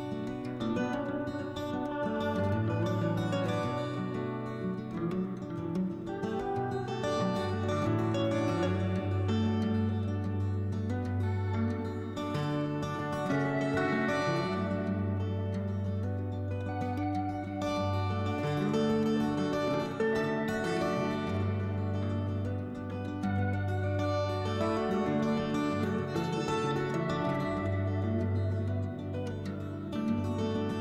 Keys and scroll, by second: 0.9 s, 3.8 s, 5.9 ctrl+z, 9.4 s, 13.1 s, 14.7 s, 17.3 s, 18.6 s, 24.1 s, 25.9 s, 27.1 s, 28.6 s, 29.8 s.